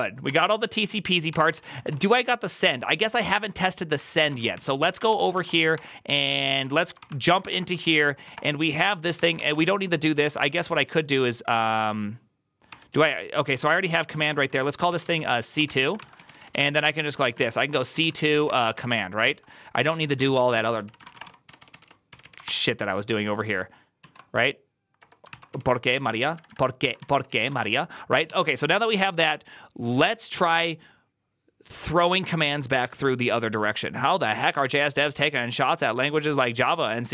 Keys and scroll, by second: 1.2 ctrl+d, 1.4-10.6 typing, 6.8 ctrl+d, 11.4 ctrl+u, 12.5 ctrl+d, 12.5 typing, 12.8 ctrl+u, 13.4 ctrl+d, 13.8-22.8 typing, 23.9 ctrl+u, 24.9-28.6 typing, 25.1 ctrl+c.